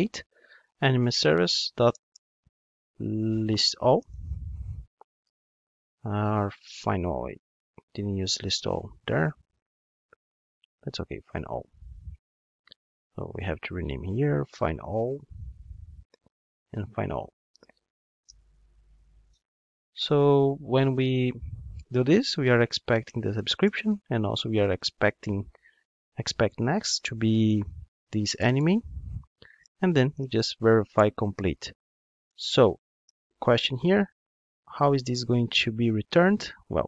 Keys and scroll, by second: 3.1 super+z, 8.5 super+b, 13.3 super+c, 23.1 Return, 33.1 alt+super+l.